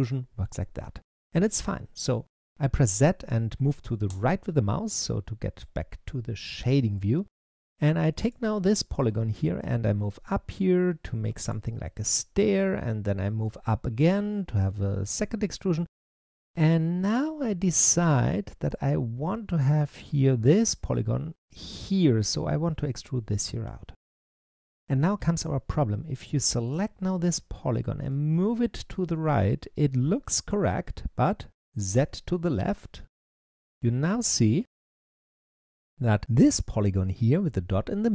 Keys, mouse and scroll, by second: 4.0 z, 4.9 middle click, 5.8-6.4 scroll down 1, 6.4-8.1 shift+middle drag, 8.1 click, 8.5 middle click, 9.4 click, 11.8-13.3 shift+middle drag, 13.3 click, 18.0-21.0 middle drag, 26.5 click, 27.9 click, 31.8 z, 33.0-33.6 scroll up 2, 33.6-37.6 middle drag.